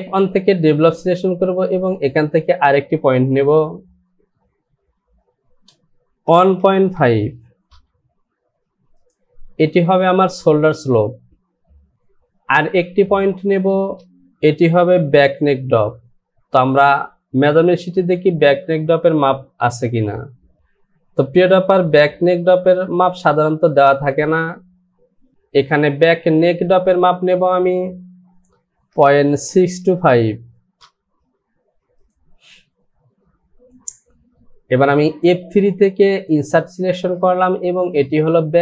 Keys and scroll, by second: 5.4 Down, 6.3 KP_1, 13.8 space, 28.9 KP_Decimal, 29.5 KP_6, 30.1 KP_2, 30.8 n.